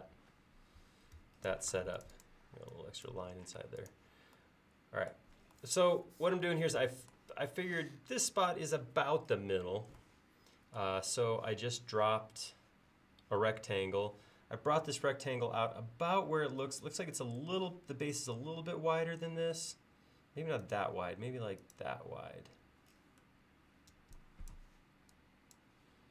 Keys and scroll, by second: 1.3 Escape, 1.8 space, 2.5 e, 3.6 space, 14.7 l, 22.2 e, 24.0 e.